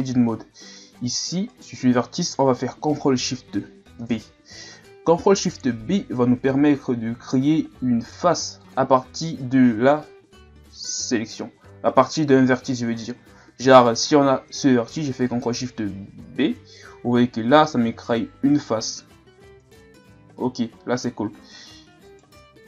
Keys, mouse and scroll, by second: 0.1-1.5 shift+scroll up 3, 1.5 right click, 4.0 ctrl+shift+b, 13.7 right click, 16.5 ctrl+shift+b, 21.4 g.